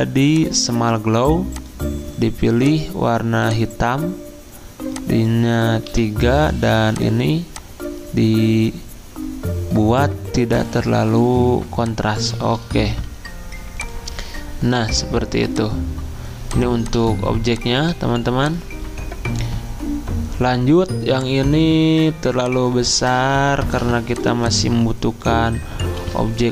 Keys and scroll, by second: 5.9 3, 12.9 5, 18.1 ctrl+z, 23.0 ctrl+z, 23.6 ctrl+g, 26.0 ctrl+g.